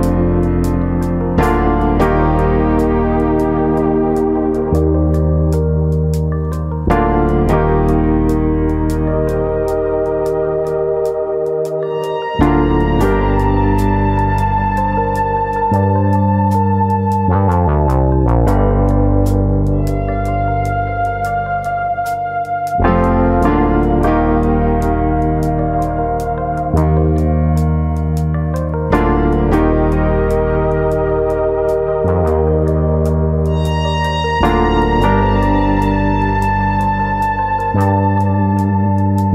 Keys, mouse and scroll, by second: 0.6 shift+middle click, 1.5 shift+middle click, 1.5 scroll up 1, 2.3 middle click, 2.4 shift+middle click, 3.2 s, 3.7 click, 3.8 middle click, 4.4 click, 5.0 s, 5.7 click, 6.1 click, 7.2 middle click, 7.9 click, 8.7 middle click, 9.1 scroll down 1, 9.3 middle click, 10.2 click, 10.6 click, 10.8 right click, 11.4 middle click, 12.3 click, 14.1 click, 15.1 click, 15.1-16.0 scroll down 6, 15.5 middle click, 16.0 shift+middle click, 16.3 middle click, 17.2 scroll up 2, 17.4 middle click, 18.0 middle click, 18.1 shift+middle click, 18.4 scroll up 1, 18.6 middle click, 18.8 middle click, 18.9 click, 19.3 scroll up 2, 19.5 Tab, 19.7 middle click, 20.5 alt+click, 21.6 ctrl+e, 23.5 middle click, 24.5 middle click, 26.2 middle click, 26.6 middle click, 29.0 middle click, 29.0 alt+click, 29.2 middle click, 30.0 alt+shift+click, 32.0 ctrl+e, 32.8 middle click, 33.3 shift+middle click, 33.6 middle click, 34.3 click, 35.0 ctrl+click, 35.8 ctrl+e, 37.2 shift+middle click, 37.8 alt+click, 38.6 ctrl+e.